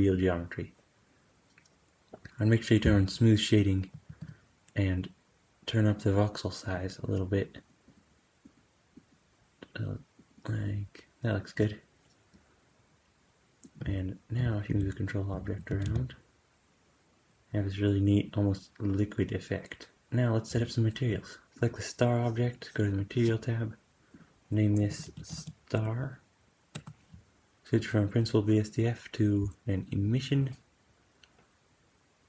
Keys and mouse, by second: 4.0 super+s, 5.8-13.6 drag, 14.6 g, 15.8 g, 15.8 space, 19.9 super+s, 22.9 click, 24.1-32.2 drag.